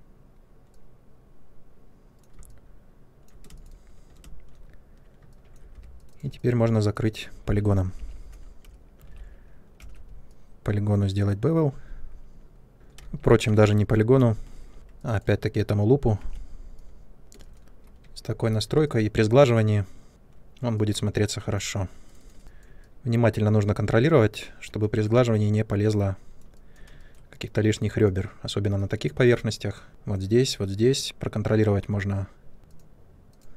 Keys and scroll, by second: 3.4 space, 4.2 ctrl+space, 5.7 2, 7.9 p, 9.0 alt+3, 9.7 b, 12.9 ctrl+z, 14.1 space, 14.7 2, 17.3 space, 22.4 ctrl+1.